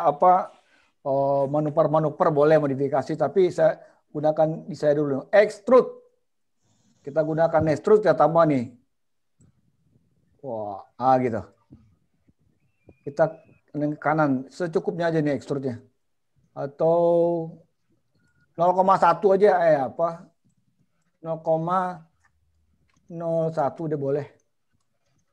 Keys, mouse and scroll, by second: 9.4 click, 20.6 click, 23.2 click.